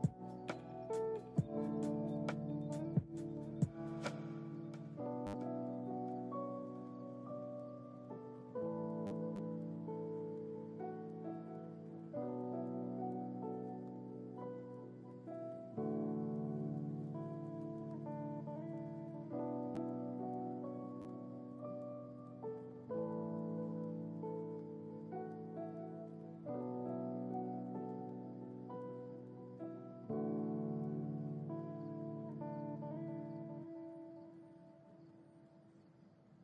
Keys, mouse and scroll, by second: 1.2 click, 2.2 ctrl+z, 2.6 ctrl+z, 3.9 click, 5.0-5.4 drag, 6.4 click, 7.1 click, 7.9 drag, 8.5-8.9 drag, 10.3 click, 10.9 click, 12.5 click, 16.1 click, 19.7 click, 20.7 click, 21.5 click, 22.0 click, 23.2 click, 24.2-31.6 drag, 33.0 click, 34.0-35.0 drag, 36.1-36.4 scroll up 3.